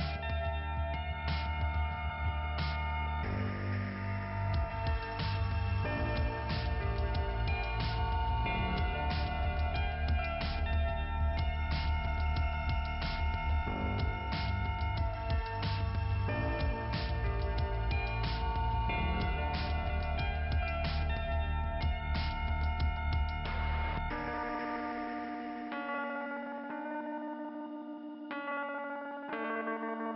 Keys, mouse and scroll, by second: 5.0 middle click, 8.9-9.7 scroll down 1, 9.7 click, 9.8 scroll down 1, 10.0 click, 10.3 click, 10.7 click, 11.4 click, 12.5 click, 13.1 scroll down 1, 14.1 click, 14.8 click, 15.6 click, 16.7 click, 17.3 click, 18.1 click, 19.9 click, 20.5 click, 20.5 click, 21.3 click, 21.7 click, 22.1-22.6 scroll down 3, 23.7-24.2 scroll down 3, 25.2 middle click, 27.6 middle click, 28.6 click.